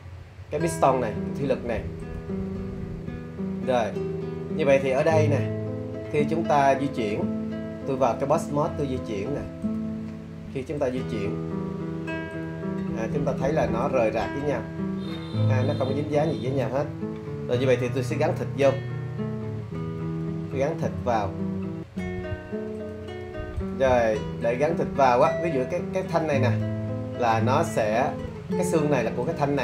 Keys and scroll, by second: 20.2 super+z.